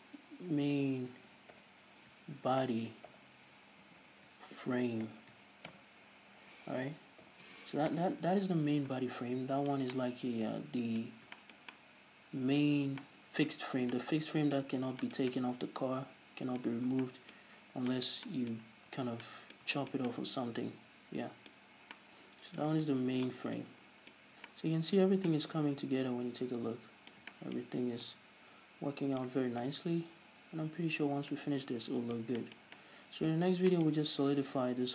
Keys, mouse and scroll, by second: 8.5-9.8 drag, 9.5 scroll down 2, 9.8-34.9 middle drag, 11.7 scroll down 2, 13.3-13.6 scroll up 2, 14.3 scroll down 2, 15.2-15.6 scroll up 2, 17.4 scroll down 2, 18.0-18.5 scroll up 2, 19.2 a, 24.0 scroll down 1, 24.7 scroll up 1, 25.5-25.8 scroll up 1, 28.2 scroll up 1, 30.0 scroll down 2, 31.7 scroll down 2, 33.9-34.3 scroll up 2.